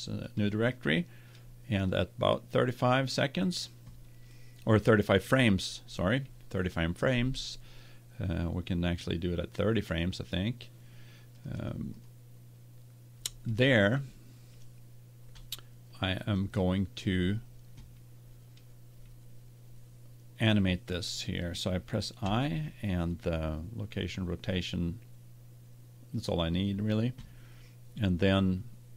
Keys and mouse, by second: 11.3-14.6 drag, 16.2-18.0 drag, 22.2 i.